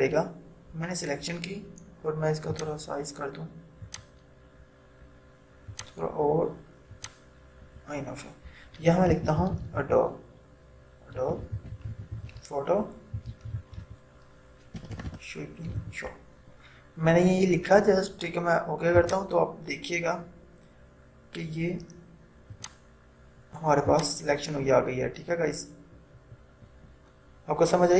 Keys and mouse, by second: 2.6 click, 9.1-10.4 typing, 11.5-15.9 typing, 19.1 click, 23.0-27.9 drag.